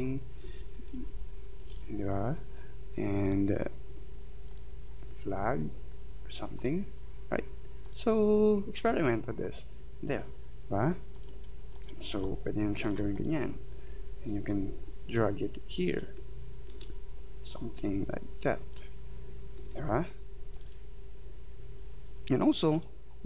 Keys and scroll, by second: 12.2 space.